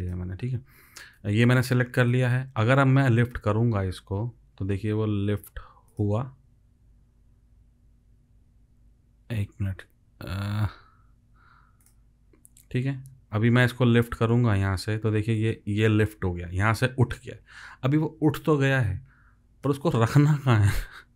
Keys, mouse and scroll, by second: 10.5 ctrl+z.